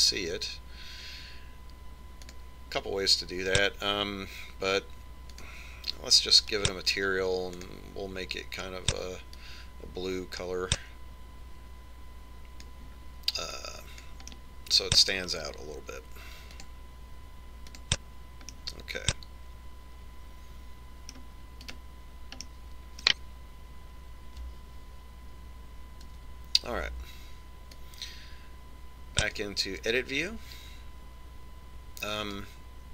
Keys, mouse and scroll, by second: 3.4 click, 6.6 click, 8.8 click, 14.8 click, 15.6-17.3 middle drag, 17.8 click, 19.9-21.5 middle drag, 23.0 right click, 23.7-25.6 middle drag, 27.5 Tab, 29.1 click.